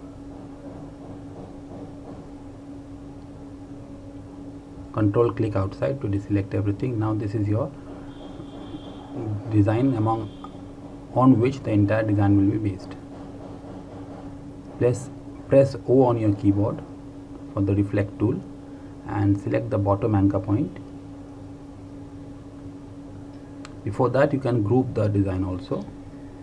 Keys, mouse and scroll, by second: 2.3 ctrl+Num_Lock, 2.7 ctrl+click, 6.5 click, 10.4 ctrl+g, 16.0 o, 24.0 alt+Num_Lock, 24.3 alt+click.